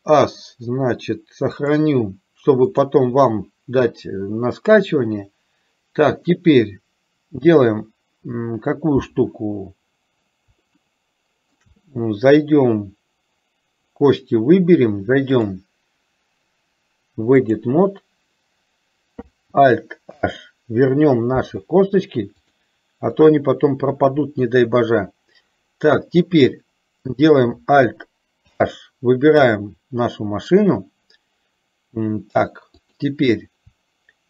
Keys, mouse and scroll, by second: 11.0 shift+middle click, 15.5-17.9 drag, 20.3 alt+h, 22.5-23.5 drag, 28.6 alt+h, 32.8 click.